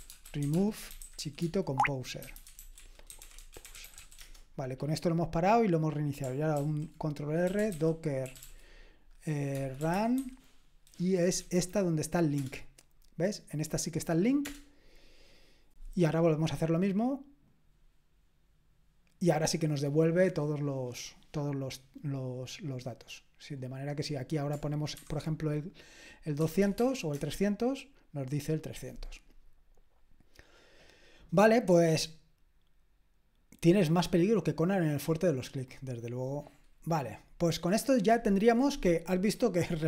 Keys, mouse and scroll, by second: 0.0-4.5 typing, 6.6 ctrl+r, 7.2-10.6 typing, 12.4 Return, 14.4 Return, 17.5 click, 26.1-27.2 typing, 36.0-39.8 drag.